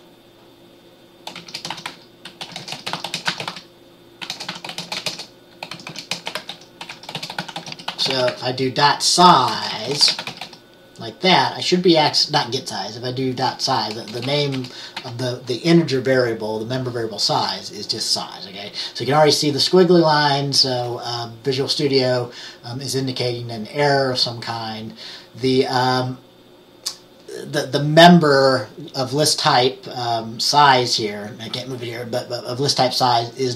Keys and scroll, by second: 1.2-11.0 typing, 14.2-15.1 typing.